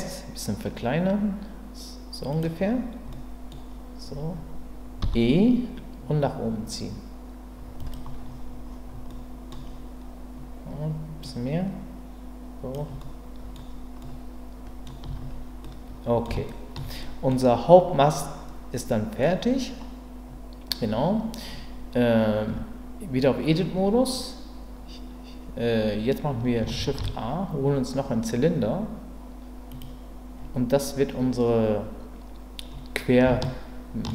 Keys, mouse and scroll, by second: 2.3 click, 3.1 middle click, 5.0 e, 7.8 click, 9.1 middle click, 11.3-12.7 drag, 13.0-15.0 middle drag, 15.0 Tab, 15.6-16.2 middle drag, 16.5 shift+middle drag, 17.0 middle click, 18.1-19.2 middle drag, 22.5 Tab, 26.8 shift+a, 33.5 shift+middle click.